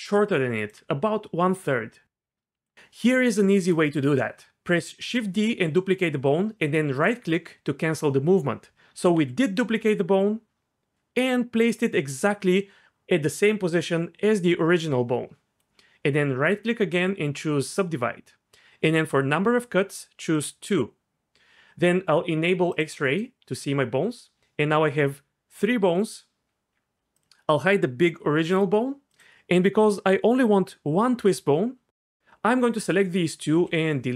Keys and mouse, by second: 2.5 d, 4.9 shift+d, 6.9-8.0 drag, 8.7 g, 10.6 g, 16.6-17.7 right drag, 17.7 click, 28.4 h, 29.1 click.